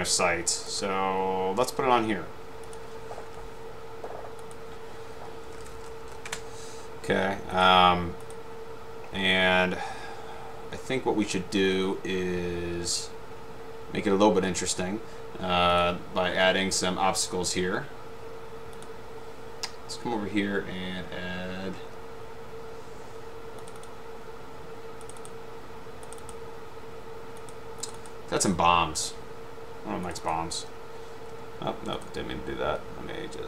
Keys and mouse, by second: 0.9 click, 2.8 click, 4.6-5.2 drag, 5.3-6.6 typing, 7.7 click, 8.4 click, 15.9 click, 23.8 click, 23.9 click, 25.2 click, 26.4 click, 28.1 click, 30.2 click, 30.4 click.